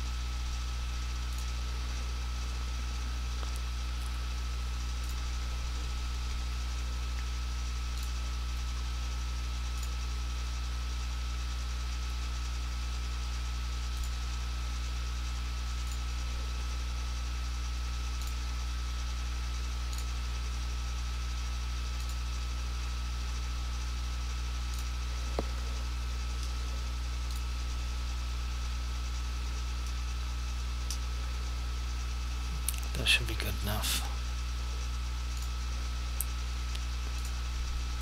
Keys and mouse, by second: 5.1 click, 8.0 click, 14.1 click, 35.5 click.